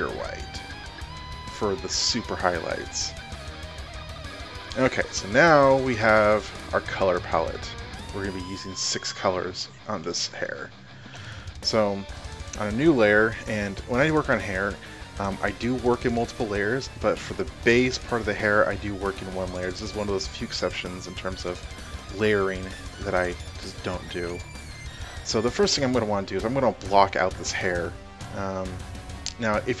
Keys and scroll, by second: 8.8 space, 22.0 space.